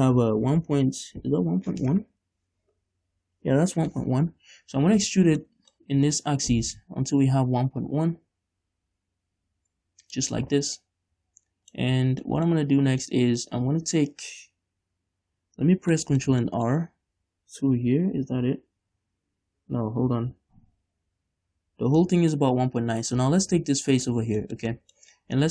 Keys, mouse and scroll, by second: 5.6 middle click, 5.9 scroll down 2, 6.0 e, 10.3 shift+click, 11.0 middle click, 13.2-20.7 middle drag, 22.2-23.2 middle drag, 23.2-24.6 right drag, 24.6-25.5 shift+middle drag.